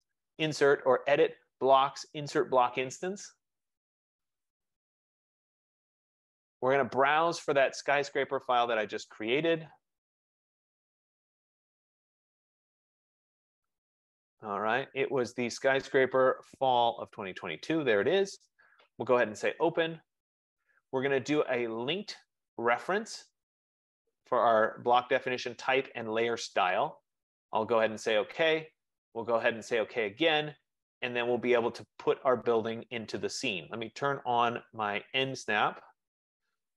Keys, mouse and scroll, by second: 4.6 click, 7.5 click, 10.2 click, 11.9 click, 13.6 click, 13.7 click, 17.7 click, 19.5 click, 21.8 click, 23.0 click, 29.9 click, 34.2 F15, 35.7 click.